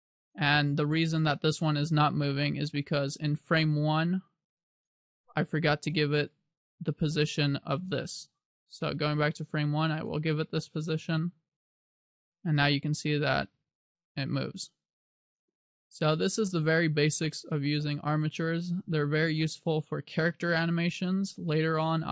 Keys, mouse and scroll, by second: 2.6 click, 6.1 r, 8.4 click, 8.8 i, 10.4 i, 12.3 click.